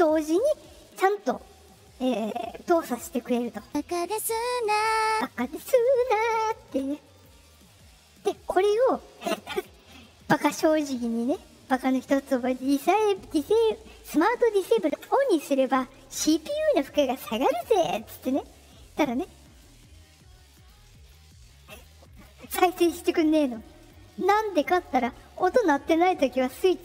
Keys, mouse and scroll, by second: 3.5 click, 4.9 click, 7.1 click, 9.7 click, 14.9 click, 19.5 click, 20.5 click, 20.9 click, 21.6 click, 22.1 click, 23.4 click, 23.7 click, 24.6 click.